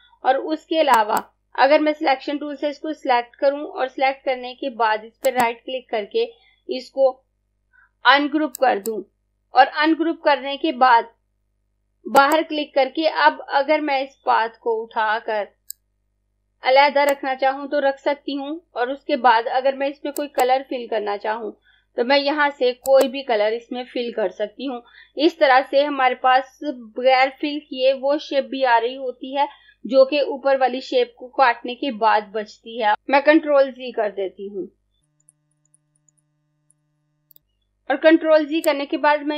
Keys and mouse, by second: 0.9 click, 5.0 right click, 12.1 click, 15.6 click, 20.1 click, 34.1 z, 35.2 z, 35.9 z, 36.7 z, 37.3 click.